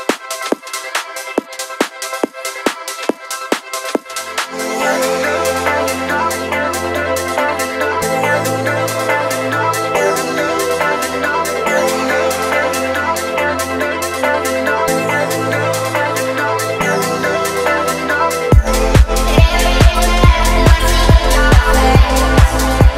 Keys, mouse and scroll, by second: 1.2 click, 1.8 middle click, 3.3 alt+shift+click, 4.4 alt+shift+click, 4.8 middle click, 5.5 shift+middle click, 8.5 alt+shift+click, 9.4 alt+shift+click, 9.9 middle click, 11.5 f, 12.1 click, 12.5 scroll down 1, 12.9 shift+middle click, 13.4-15.0 middle drag, 15.3 Tab, 16.2 ctrl+a, 18.6-19.0 scroll down 1, 19.0-20.9 middle drag, 21.2 scroll down 1, 22.7-22.9 scroll up 1.